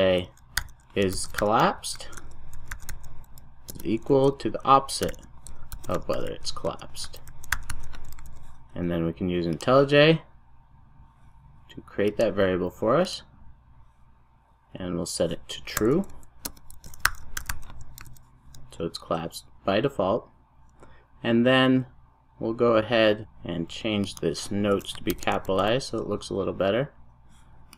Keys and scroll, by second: 8.2 super+s, 18.0 super+s, 25.5 super+s.